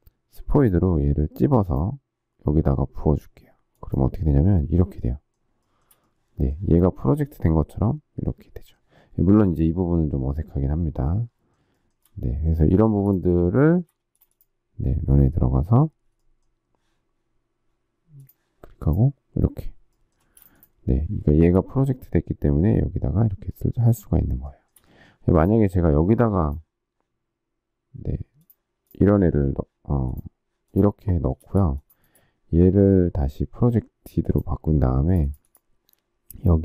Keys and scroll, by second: 13.9 shift+space, 20.2 space, 31.3 space.